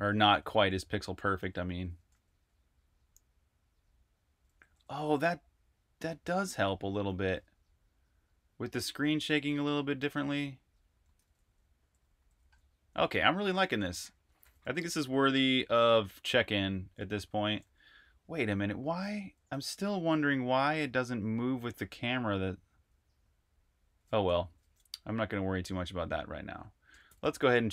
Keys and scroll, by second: 0.0-2.5 typing, 4.1-5.5 typing, 6.7-7.5 typing, 8.9-22.1 typing, 23.4-24.1 typing, 24.3 super+q, 26.7 Escape, 26.8-27.7 typing.